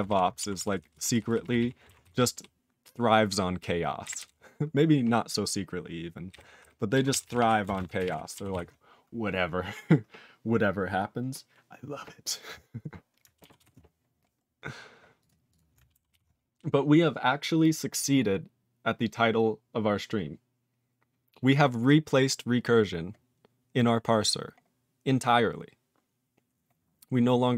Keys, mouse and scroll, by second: 0.0 ctrl+e, 0.5 ctrl+s, 0.7 ctrl+p, 0.9-1.4 ctrl+p, 1.5 ctrl+e, 2.0 ctrl+s, 2.1 ctrl+p, 4.0 ctrl+n, 4.1 ctrl+n, 6.3 ctrl+n, 6.6 ctrl+n, 7.0 ctrl+s, 7.2 ctrl+p, 7.3 ctrl+e, 7.6 ctrl+space, 7.7 ctrl+a, 7.9 ctrl+g, 8.0 ctrl+e, 8.5 ctrl+s, 13.5 ctrl+s, 14.4 scroll down 1, 15.1 click, 15.2 click, 15.4 click, 15.5 click, 16.1 ctrl+s, 21.6-23.0 scroll down 2, 23.0-23.9 scroll down 1, 23.9-24.4 scroll down 4, 24.4-25.5 scroll up 12, 26.0 scroll down 10.